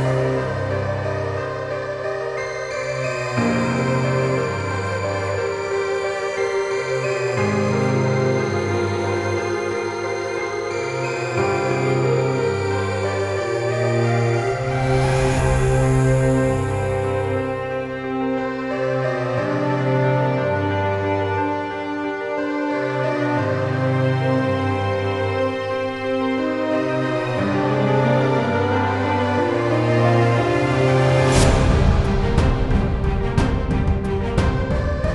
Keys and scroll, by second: 9.0 Delete, 11.0 typing, 30.2 ctrl+c.